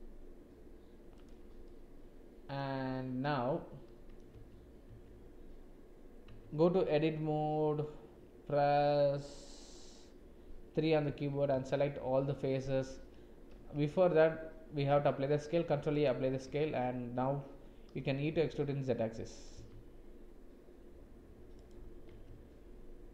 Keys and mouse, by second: 1.8 click, 3.2-4.2 drag, 4.3 Tab, 4.8 Tab, 6.2 Tab, 11.5 a, 13.7 Tab, 15.2 ctrl+a, 16.4 Tab, 18.0 e, 22.1 Tab.